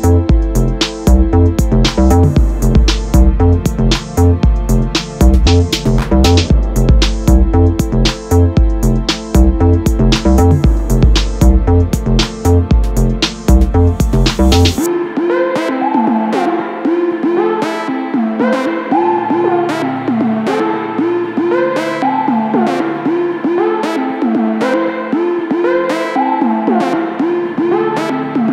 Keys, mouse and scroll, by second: 0.4 click, 0.4 g, 2.4 click, 7.3-8.8 middle drag, 8.8 click, 9.3 Tab, 9.7 click, 9.8-13.5 middle drag, 10.2 ctrl+b, 13.7 click, 14.1 ctrl+b, 16.6 middle click, 16.8 2, 16.9 click, 17.2 g, 18.3 middle click, 18.5 3, 18.6 click, 18.7 shift+click, 18.8 shift+click, 19.1-20.4 middle drag, 19.6 shift+d, 19.8 Return, 20.4 click, 20.8 Tab, 21.1 click, 21.3 alt+click, 21.6 g, 22.1 click, 22.2-28.5 middle drag, 25.6 KP_7, 26.0 z, 28.1 ctrl+z.